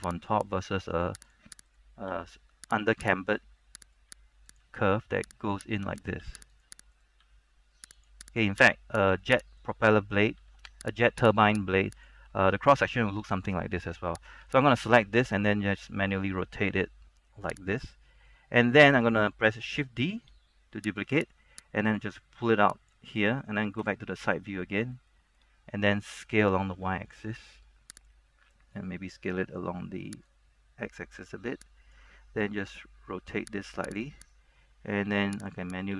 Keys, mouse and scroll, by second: 0.2 click, 0.6 right click, 0.8 g, 1.4 click, 1.8 right click, 2.2 g, 3.1 click, 3.4 right click, 4.2 g, 4.7-5.7 drag, 5.7 right click, 6.7 click, 7.1 right click, 8.1 click, 8.6 right click, 9.2 click, 9.7-10.7 right drag, 11.0 click, 11.5 right click, 12.1 click, 14.6 alt+right click, 15.8 r, 17.8 click, 18.2 scroll down 1, 18.3 middle click, 19.2-19.9 scroll down 1, 21.0 shift+d, 21.3 right click, 22.1 click, 23.2 middle click, 23.9 KP_3, 24.5 shift+scroll down 1, 25.3 shift+middle click, 26.5 shift+s, 26.9 shift+y, 28.1-32.1 drag, 32.7 r, 34.0 click, 34.3 right click, 35.2 g, 35.5 click, 35.8 right click.